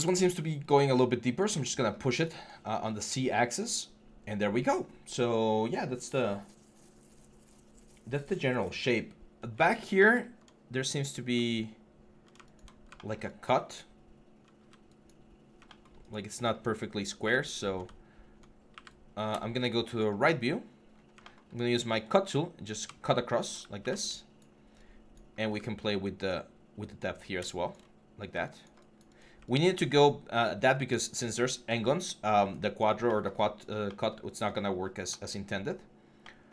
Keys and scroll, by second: 23.6 q, 25.2 w.